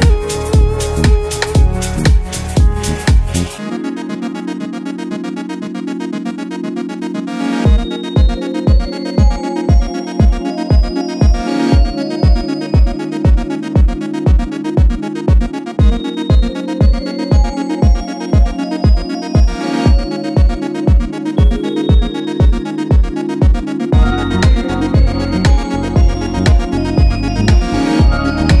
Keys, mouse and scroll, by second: 0.3 shift+click, 3.6 shift+click, 4.8 click, 5.5 click, 8.0 ctrl+z, 9.9 shift+click, 11.4 click, 12.0 click, 13.5-14.2 click, 14.3 Delete, 16.1 click, 17.2-28.6 drag, 20.0-27.5 click.